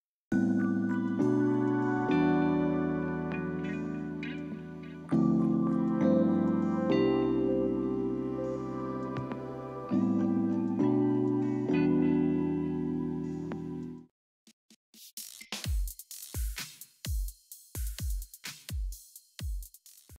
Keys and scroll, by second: 1.2 space, 2.3 space, 3.0 ctrl+=, 3.5 space, 5.3 ctrl+-, 5.6 space, 6.1 ctrl+-, 6.4 space, 7.4 space.